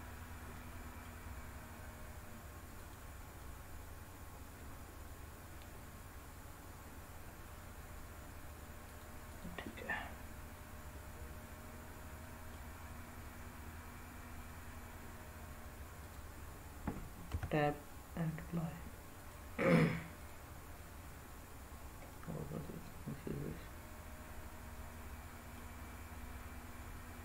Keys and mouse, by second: 0.7 middle click, 3.3-5.7 middle drag, 5.7 g, 8.7 click, 9.1 click, 9.5-12.4 middle drag, 15.9-16.5 drag, 17.2 Tab, 19.1-20.2 drag, 22.0-25.5 middle drag.